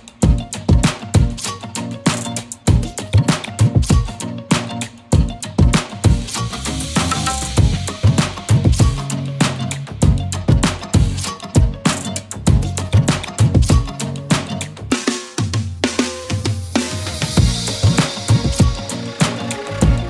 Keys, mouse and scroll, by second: 0.5-7.5 typing, 0.9 click, 7.2 click, 7.6 click, 8.1 ctrl+z, 10.2 click, 10.9 shift+click, 11.9 click, 16.4 click, 18.7-19.3 scroll up 1, 19.3 click.